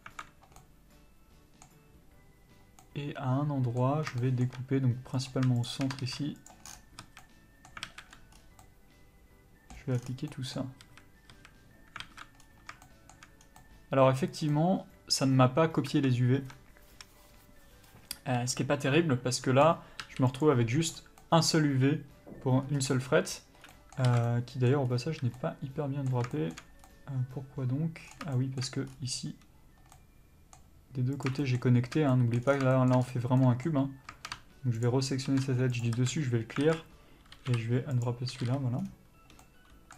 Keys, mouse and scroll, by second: 0.5 middle click, 4.1 shift+middle click, 5.1 click, 5.6 shift+click, 6.4 ctrl+e, 6.6 scroll down 1, 7.0 a, 7.2 middle click, 7.8 alt+a, 8.1 scroll up 1, 8.7 middle click, 9.9 scroll down 1, 10.3 middle click, 10.8 a, 12.0 alt+a, 12.3 scroll up 1, 12.8 shift+middle click, 13.4 scroll down 1, 13.6 middle click, 15.9 Tab, 18.8 l, 20.4 u, 23.6 scroll up 1, 23.6 middle click, 24.0 alt+a, 24.2 middle click, 24.8-25.3 scroll up 1, 25.3 middle click, 26.3 shift+middle click, 26.8 scroll up 1, 26.8 middle click, 28.1 scroll down 1, 28.3 shift+middle click, 28.8-29.9 scroll up 1, 29.9 middle click, 31.1 click, 31.4 shift+middle click, 32.1 middle click, 32.4 scroll down 1, 32.7 shift+middle click, 33.0-33.4 scroll up 1, 33.4 middle click, 34.8 ctrl+click, 35.8 ctrl+e, 35.9 a, 36.6 alt+a, 37.3 l, 37.4 u, 39.4 middle click.